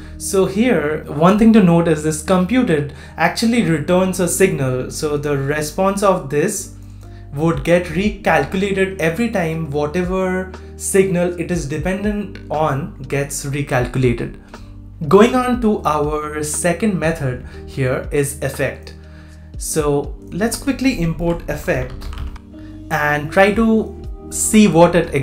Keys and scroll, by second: 22.3 super+c.